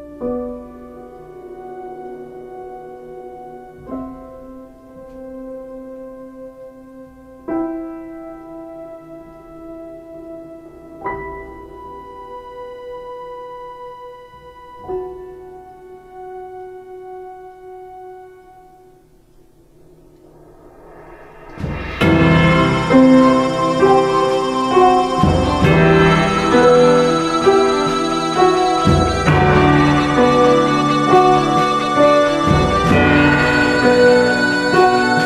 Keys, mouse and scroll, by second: 2.7 ctrl+space, 5.7 ctrl+space, 24.4 space, 27.5 x, 31.2 ctrl+space, 32.0 x, 34.9 x.